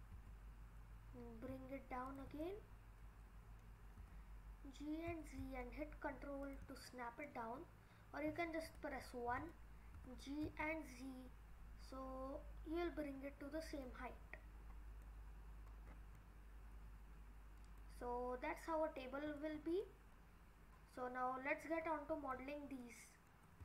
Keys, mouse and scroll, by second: 2.4 middle click, 3.4 middle click, 4.0 g, 6.8 middle click, 8.6 KP_1, 9.9 g, 14.2-14.6 scroll up 4, 14.6-15.1 scroll down 5, 15.1 middle click, 15.7 scroll down 2, 16.2 middle click, 17.8 middle click, 19.3-20.7 scroll up 9, 21.6 click, 22.6 scroll up 3, 22.8 middle click.